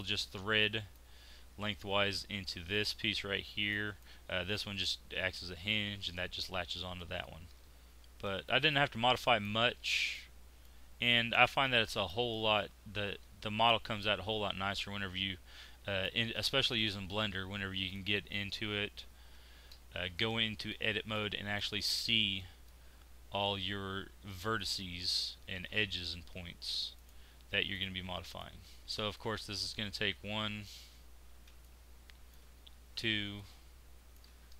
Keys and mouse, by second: 0.2 z, 3.3 z, 6.9 right click, 7.6 x, 10.1-14.0 middle drag, 19.2 Tab, 21.2-27.0 middle drag, 29.0 Tab, 30.7 z, 31.3 z.